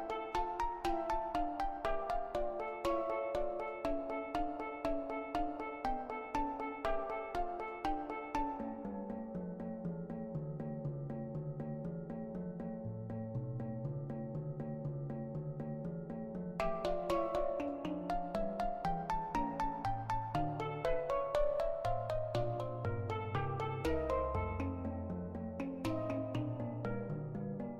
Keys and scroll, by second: 14.7 ], 25.2 ctrl+z.